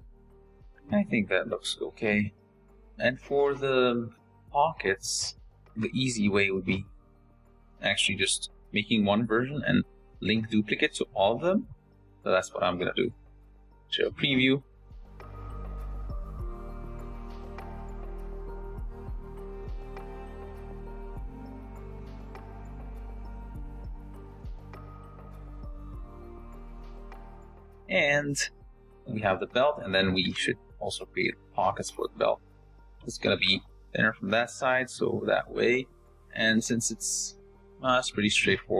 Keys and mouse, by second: 0.0 g, 1.2 z, 2.7 shift+drag, 2.7 shift+middle drag, 4.7 s, 6.5 g, 7.6 s, 8.8 z, 15.3 z, 18.4-20.0 drag, 23.0 g, 25.3-27.0 drag, 28.6 shift+click, 28.7 shift+middle drag, 29.3 click, 30.7 shift+a, 31.7 g, 32.6 click, 33.2 s, 34.2 click, 34.8 click, 35.8 drag, 37.4 click.